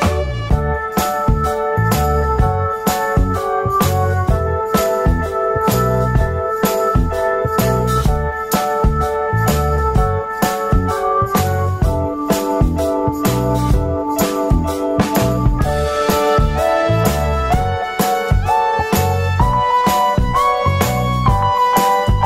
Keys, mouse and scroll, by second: 11.5 click, 13.1 click.